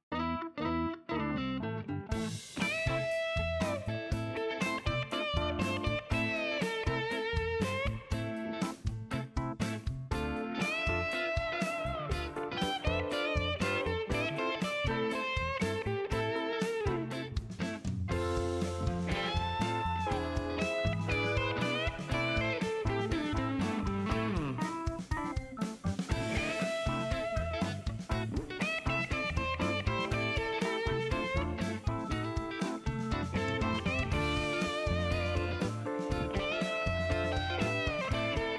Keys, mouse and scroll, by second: 0.9 click, 1.5 right click, 2.4 scroll up 1, 3.5 click, 4.7 click, 6.1 click, 7.2 click, 8.4 click, 8.8 right click, 9.7 right click, 10.1 click, 11.1-11.5 scroll up 2, 12.1 click, 13.0 click, 14.4 click, 15.5 click, 17.7 click, 20.8-22.9 typing, 24.3 click, 27.8 click, 28.8 click, 30.3 click, 31.7 scroll down 1, 33.0 click, 34.4-35.2 scroll up 8, 36.6 click, 37.1 click, 38.1 shift+right click.